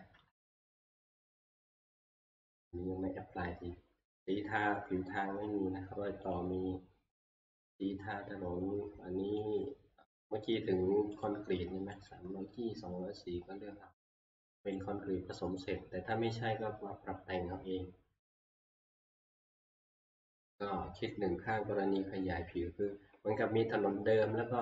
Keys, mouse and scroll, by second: 0.1 alt+Tab, 1.9 shift+scroll, 2.8 scroll, 3.0 shift+middle click, 6.3 click, 7.3 click, 9.5 click, 11.3 click, 12.1 click, 14.7 click, 19.7 click.